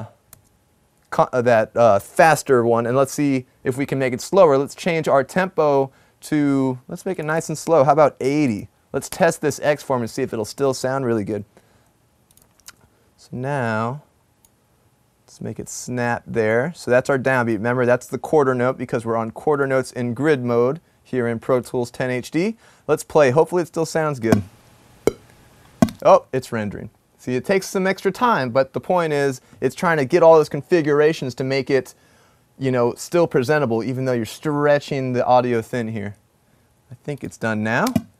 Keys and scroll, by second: 0.6 super+z, 3.4 typing, 8.2-9.0 typing, 11.4-13.0 typing, 22.5 typing.